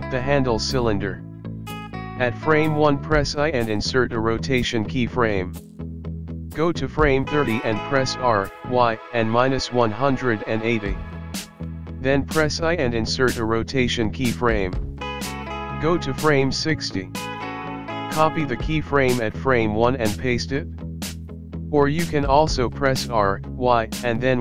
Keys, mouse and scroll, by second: 6.8 click, 8.1 click, 11.5 r, 15.2 i, 17.0 click, 20.0 click, 22.1 ctrl+c, 23.6 ctrl+v.